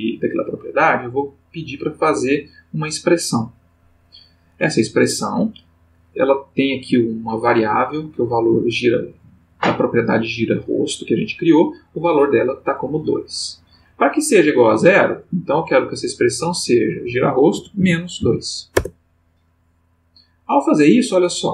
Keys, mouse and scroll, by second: 0.9 click, 2.2 click, 15.7 click, 16.5 click, 17.5 space, 17.8 -, 18.2 2, 18.7 Return.